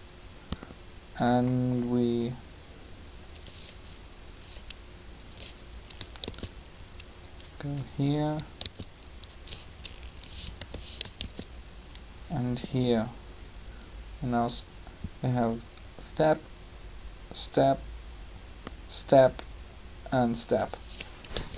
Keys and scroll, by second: 6.2 shift+d, 8.6 shift+d, 10.6 g, 11.2 shift+d, 21.4 3.